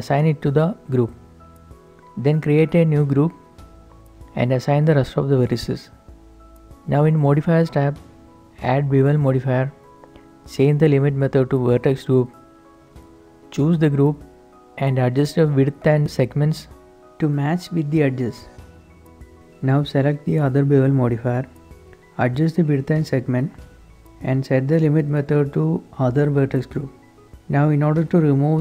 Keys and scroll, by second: 12.7 Tab, 13.2 z, 16.0-16.6 typing, 16.8 Return, 17.9-18.6 typing, 21.7-22.2 typing, 22.3 Return, 23.5-24.2 typing, 27.9 shift+Tab.